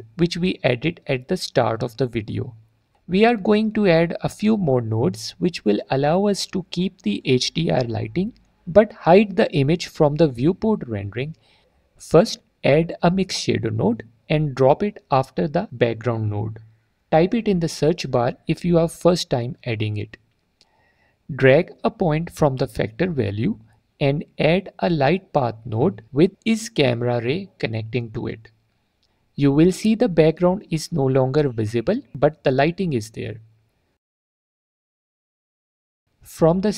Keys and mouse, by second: 0.1 middle click, 1.4 click, 3.3 click, 3.8 click, 5.4 click, 6.4 drag, 12.7 shift+a, 15.2 click, 16.6-19.3 drag, 22.1 click, 26.3-27.6 drag, 27.7 alt+click, 30.3 alt+click, 33.7 click, 34.5 click, 35.2 click.